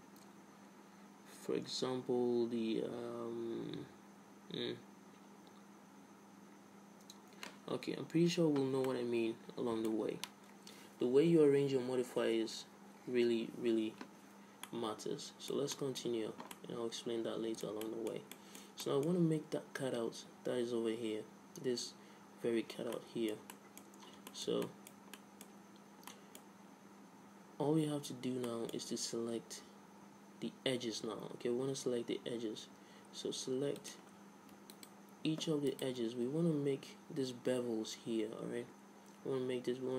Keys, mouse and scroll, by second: 9.1-10.9 middle drag, 14.9-20.8 middle drag, 23.1-28.1 middle drag, 28.7-30.7 middle drag, 34.0-36.0 drag, 35.0-37.9 right drag.